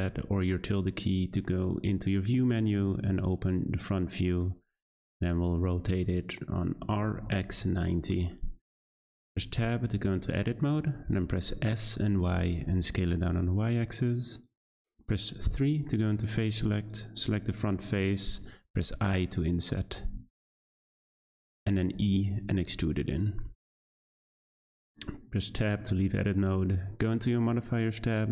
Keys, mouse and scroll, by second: 4.4-6.8 middle drag, 6.8 r, 9.1 scroll up 1, 9.1-9.4 middle drag, 9.4 Tab, 9.9 scroll down 1, 10.1 middle click, 11.0-11.5 scroll up 1, 11.5 s, 15.3 3, 16.8 click, 17.3 middle click, 17.8-18.8 scroll up 2, 18.8 i, 21.9 e, 24.5 click, 24.7 Tab, 25.2-27.0 scroll up 2, 27.0 click.